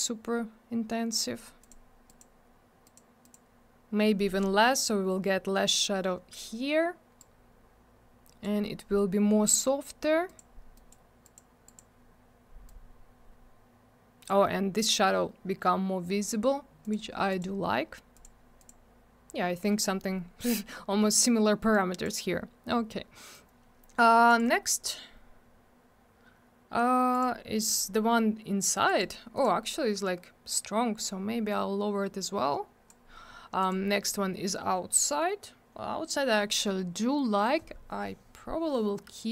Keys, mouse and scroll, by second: 1.6 click, 1.7 click, 2.1 click, 2.2 double click, 2.8 click, 2.9 click, 3.2 click, 3.3 double click, 7.2 click, 10.3 click, 10.4 click, 10.7 click, 10.9 click, 11.2 click, 11.3 click, 11.7 click, 11.8 double click, 12.7 click, 16.8 click, 16.9 click, 17.3 click, 17.4 double click, 18.1 click, 18.2 click, 18.6 click, 18.7 double click, 21.7 click, 24.3 click, 24.4 click, 27.1 click, 27.2 click, 27.7 click, 27.8 click, 28.9 click, 29.0 click, 29.3 click, 29.4 click, 31.0 click, 33.6 click, 33.7 click.